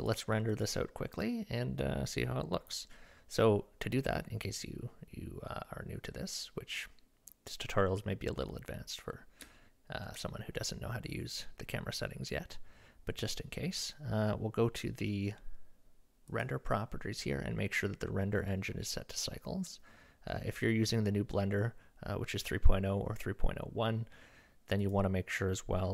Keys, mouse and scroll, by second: 0.0 click, 0.6 click, 1.1 middle click, 5.5 middle drag, 9.6-10.0 shift+middle drag, 24.8 click.